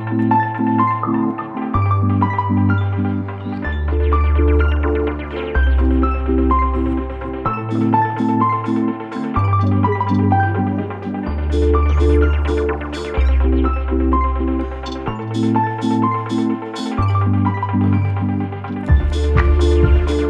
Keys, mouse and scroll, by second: 0.2 click, 1.9 click, 3.7 click, 5.5 click, 6.5 click, 7.6 click, 12.4 click, 14.6-16.2 drag, 16.4 KP_0, 19.5 click.